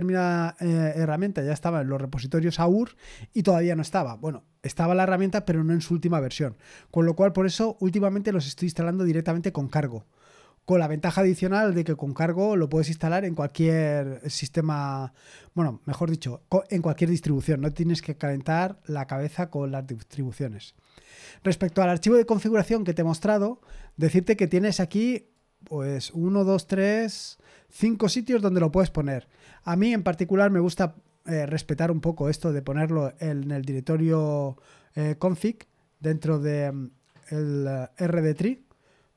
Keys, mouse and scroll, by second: 18.8 scroll down 1.